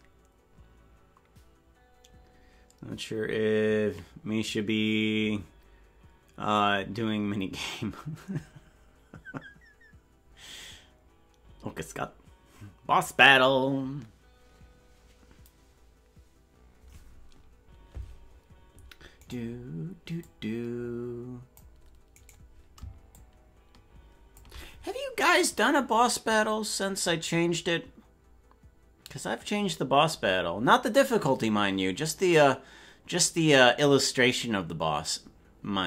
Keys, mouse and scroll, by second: 19.4 right click, 20.2-21.6 drag, 22.3 right click, 23.1-24.4 shift+drag.